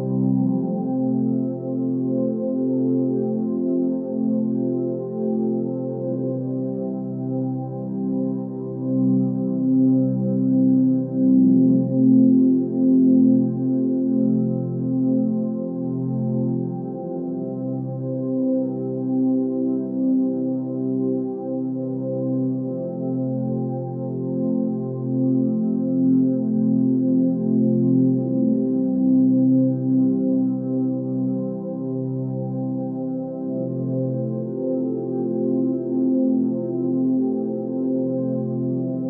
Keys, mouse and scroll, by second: 8.5 ctrl+space.